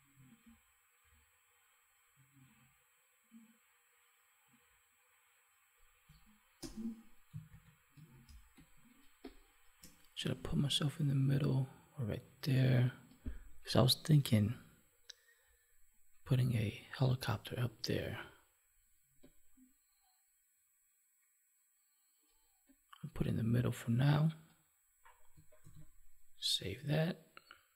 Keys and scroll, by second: 7.4 ctrl+1, 25.5 ctrl+s.